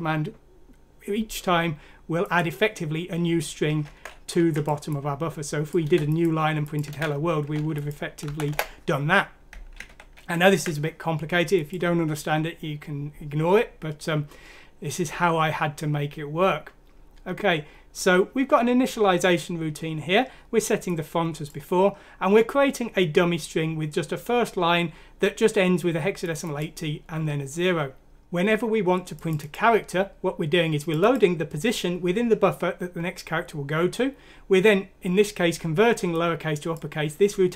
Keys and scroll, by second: 5.8 ctrl+c, 6.9 ctrl+v, 8.2 Delete, 8.5 BackSpace, 9.9 ctrl+z, 10.2 ctrl+z.